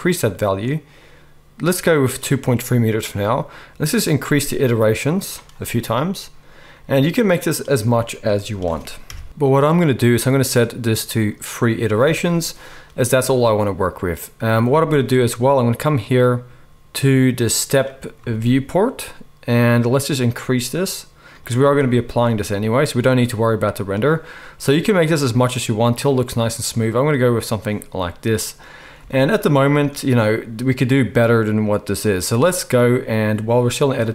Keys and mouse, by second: 21.9 z.